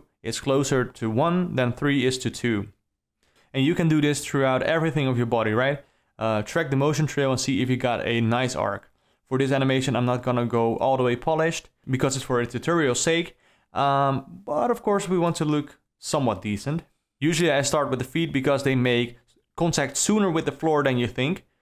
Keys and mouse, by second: 0.0 click, 0.3 shift+Left, 0.3 Right, 0.5 g, 0.9 g, 1.2 g, 2.1 Right, 2.4-6.3 typing, 3.4 Up, 5.2 Up, 7.1 Down, 7.2 Down, 7.4-11.6 typing, 8.1 Up, 10.0 Up, 11.8 alt+a, 12.5 click, 12.9 Up, 12.9 shift+Right, 13.0 q, 16.7 click, 16.9-17.2 alt+middle drag, 17.7 ctrl+middle drag, 18.1 middle drag, 18.7 alt+middle click, 20.5 Right, 20.9 Right, 21.1 Right.